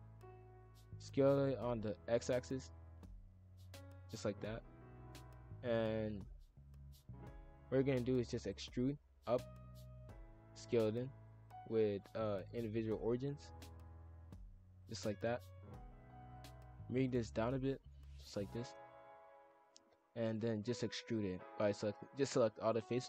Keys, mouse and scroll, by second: 1.0 s, 4.5 shift+f, 8.2 e, 9.2 click, 10.5 s, 12.2-13.5 drag, 13.5 s, 14.8 shift+f, 17.7 click, 18.8 shift+f, 19.9 click, 20.2 shift+f, 23.0 shift+click.